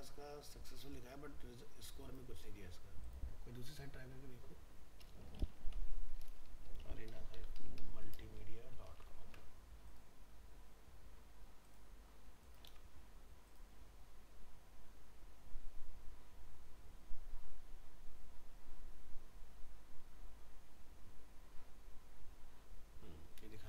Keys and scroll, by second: 8.9 ctrl+a, 9.2 ctrl+c, 12.7 ctrl+v.